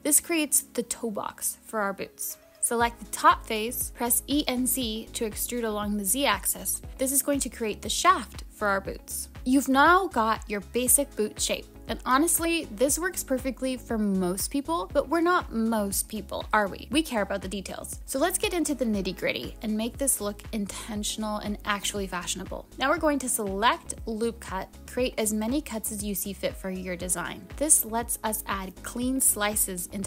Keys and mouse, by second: 7.5 super+z, 7.5 e, 12.5 click, 23.5 click, 25.1 click, 25.9 click, 26.6 click, 27.2 click.